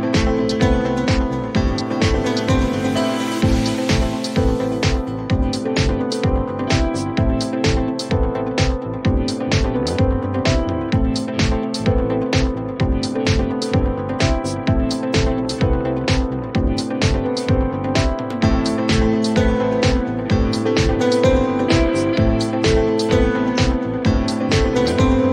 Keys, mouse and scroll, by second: 0.7 click, 1.4-2.1 typing, 1.9 click, 2.3 Return, 4.0 click, 4.6-4.9 typing, 5.5 click, 7.9 click, 8.3-9.5 typing, 12.1 click, 12.4-13.6 typing, 16.1 alt+click, 19.2-20.6 typing, 21.5 Return, 23.0 Return, 24.1-24.6 scroll, 25.2-25.3 scroll.